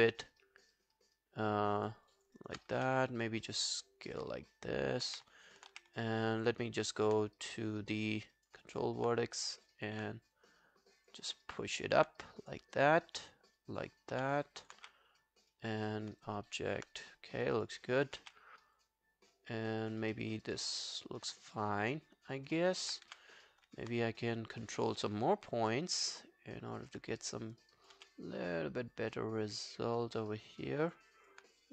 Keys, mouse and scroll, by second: 1.9 w, 2.1 alt+click, 2.4 alt+right click, 2.8 r, 4.4 alt+click, 5.1 w, 5.3 alt+click, 5.8 w, 6.1 alt+click, 6.9 alt+click, 7.6 right click, 8.7 alt+click, 9.7 alt+click, 14.4 q, 14.5 alt+click, 14.8 w, 15.2 right click, 16.3 alt+click, 17.9 alt+click, 18.2 w, 20.2 alt+middle click, 20.4 alt+right click, 20.6 alt+click, 22.6 alt+middle click, 23.1 r, 24.2 right click, 25.2 alt+click, 28.0 w, 31.1 alt+click.